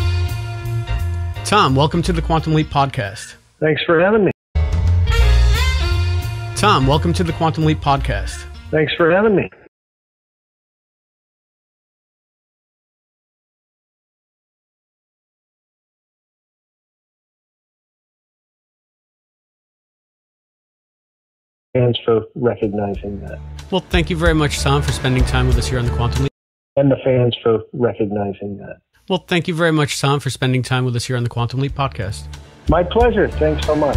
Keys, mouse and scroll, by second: 2.8-4.1 drag, 4.1 space, 4.4 click, 4.4 space, 9.6 space, 9.7-12.9 drag, 14.3-16.4 drag, 19.9 click, 21.6 click, 21.6 space, 22.3-22.9 scroll down 5, 23.7 click, 24.3 click, 25.3 click, 26.2 space, 26.6 click, 26.7 space.